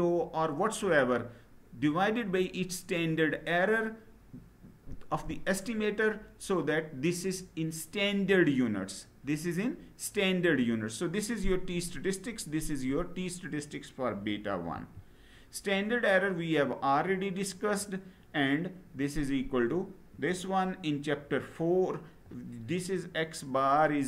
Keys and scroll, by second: 14.5 Down.